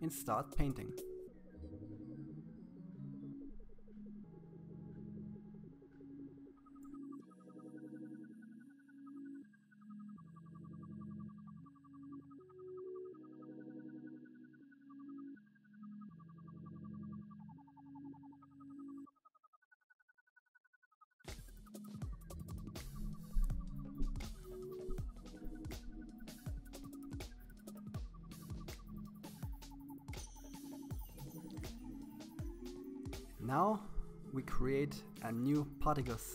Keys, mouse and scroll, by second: 0.5-2.1 drag, 7.3 click, 8.2 middle click, 8.4 KP_1, 8.5 scroll up 2, 8.5 shift+middle click, 9.0 click, 10.0 middle click, 10.2-10.6 scroll down 4, 10.6 KP_1, 10.7 scroll up 2, 11.4 click, 12.0 click, 12.6 click, 13.6 middle click, 14.4 scroll down 1, 14.4 middle click, 14.8 click, 15.6 middle click, 16.2 click, 17.3 right click, 17.6 right click, 17.7 middle click, 18.3-19.9 drag, 20.0 middle click, 20.5 click, 21.0 middle click, 21.6 click, 22.2 right click, 22.5 middle click, 22.6 KP_1, 22.8-24.2 drag, 26.1-27.6 drag, 29.8 click, 33.7 click.